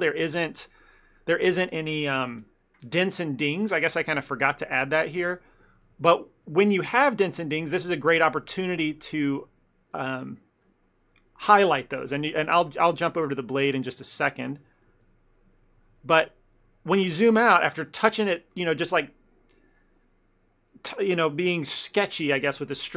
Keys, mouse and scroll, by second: 0.3 f, 0.5 ctrl+middle click, 0.8 middle click, 4.1 ctrl+middle click, 4.2 ctrl+middle click, 4.4 shift+middle click, 4.6 shift+middle click, 4.7 middle click, 5.0 middle click, 5.2 ctrl+middle click, 5.8 click, 6.0 click, 7.8 middle click, 8.2 shift+middle click, 8.6 click, 8.9 click, 10.8 click, 11.9 middle click, 12.4 click, 12.6 click, 13.1 ctrl+middle click, 13.3 middle click, 13.7 middle click, 13.7 ctrl+middle click, 14.2 shift+middle click, 14.4 shift+middle click, 14.9 click, 15.1 click, 15.4 middle click, 15.6 ctrl+middle click, 16.1 middle click, 16.5 ctrl+middle click, 16.7 middle click, 17.0 middle click, 17.1 ctrl+middle click, 17.4 middle click, 17.6 middle click.